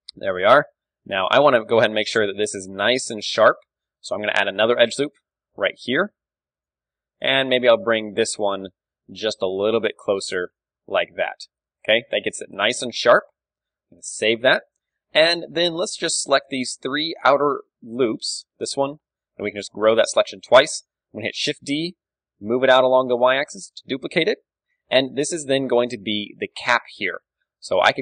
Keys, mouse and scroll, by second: 0.0-1.0 drag, 1.0-5.3 middle drag, 1.3 Tab, 1.3 KP_3, 4.3 ctrl+r, 5.5-8.9 right drag, 5.5 s, 6.7-8.7 drag, 6.8 a, 7.4 ctrl+e, 10.6-12.4 drag, 10.6 Tab, 12.4 middle click, 13.3 KP_3, 13.7 ctrl+w, 15.0 Tab, 15.8 a, 16.4 click, 16.9-18.0 middle drag, 18.0-20.4 right drag, 19.6 ctrl+KP_Add, 19.8 ctrl+KP_Add, 20.4 KP_3, 21.5 shift+d, 23.8 click, 25.0 KP_3, 25.0 click, 25.5-28.0 middle drag.